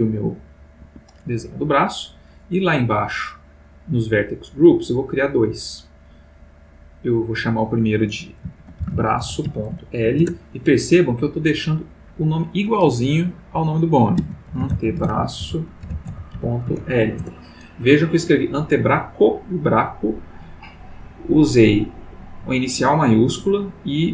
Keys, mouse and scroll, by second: 0.8 Escape, 2.1 middle click, 2.7 middle click, 3.4 middle click, 5.0 click, 5.5 click, 6.6 click, 7.3 click, 8.6-9.8 typing, 10.2 shift+Return, 11.6 click, 14.1-16.8 typing, 17.1 shift+Return.